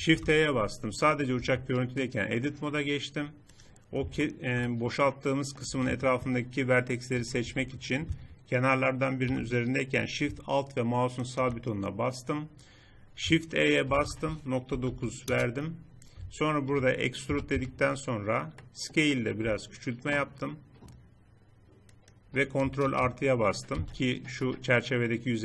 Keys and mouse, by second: 0.0 shift+h, 1.4 Tab, 7.1 a, 7.4 a, 11.2-12.9 right drag, 12.9 click, 13.8 shift+e, 17.3 e, 19.4 s, 22.8 ctrl+KP_Add, 23.7 z.